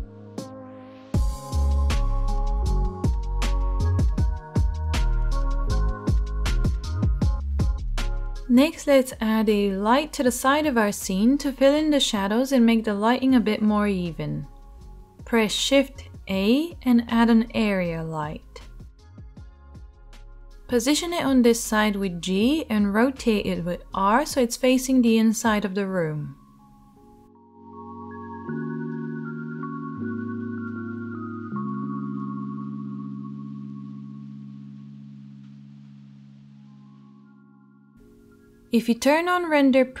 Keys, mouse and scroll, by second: 14.9 shift+a, 20.8 g, 23.1 r, 29.5-36.3 right drag, 31.0 g, 32.3 s, 35.5 g, 36.3-37.4 drag, 37.4-40.0 right drag.